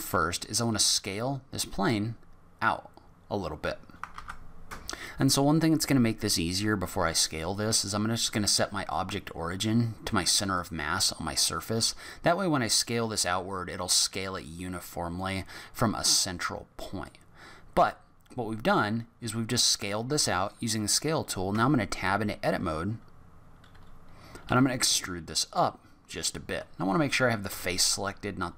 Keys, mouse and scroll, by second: 0.7 s, 4.1 ctrl+z, 7.7 click, 10.6 click, 11.7 s, 17.0 middle click, 21.5 Tab, 24.4 e, 27.4 3, 27.7 click.